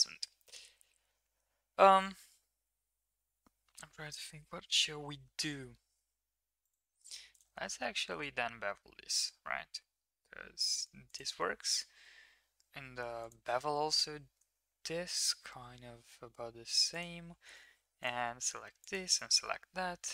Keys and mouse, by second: 5.1 ctrl+r, 8.1 ctrl+b, 14.2 ctrl+b, 17.8 3, 18.8 click, 19.1 middle drag.